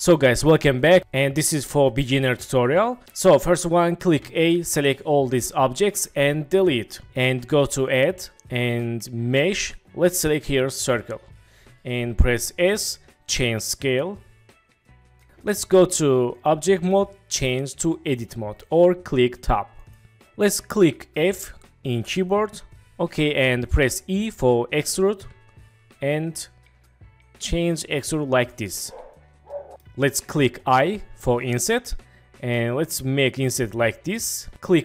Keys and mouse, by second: 4.2 a, 6.6 Delete, 7.9-10.9 drag, 12.6 s, 16.3-20.0 drag, 21.9 f, 25.2 e, 29.7 click, 30.8 i.